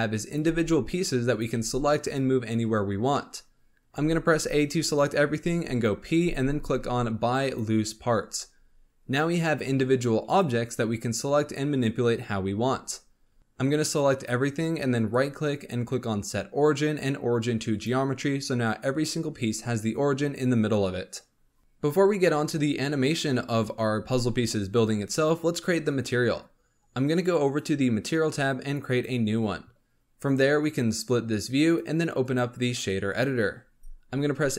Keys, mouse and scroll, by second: 0.2 click, 0.4 g, 1.2 click, 1.5 g, 2.9 scroll down 1, 3.1 middle click, 3.9 a, 5.7 p, 9.5 Tab, 9.8 click, 10.3 click, 12.6 KP_7, 13.4 right drag, 13.6-13.9 drag, 14.9-21.2 right drag, 21.6 scroll down 1, 27.4 click, 28.8-30.1 drag, 31.0-34.3 drag, 34.3-34.5 scroll up 4.